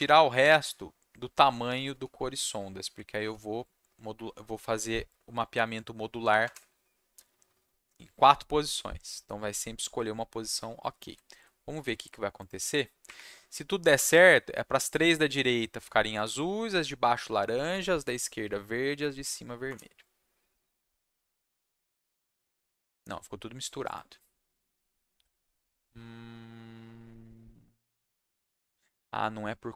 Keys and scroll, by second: 1.9 4, 3.2 /, 6.4 BackSpace, 10.9 ctrl+s, 13.0 Up, 19.6 Return.